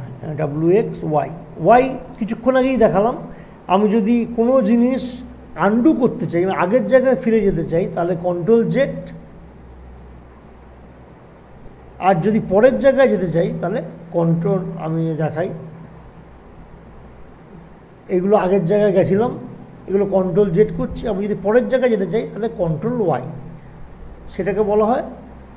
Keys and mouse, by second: 8.1 ctrl+z, 18.3 ctrl+z, 24.5 ctrl+y.